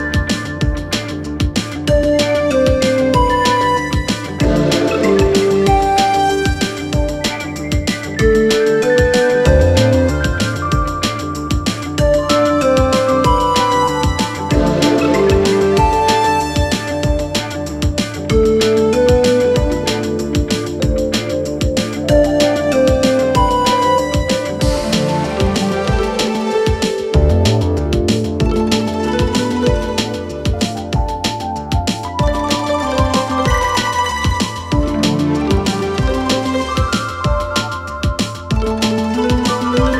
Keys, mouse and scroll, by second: 6.4-7.5 scroll down 1, 7.5 click, 22.7 t, 24.6 click, 30.8 click, 37.1 click.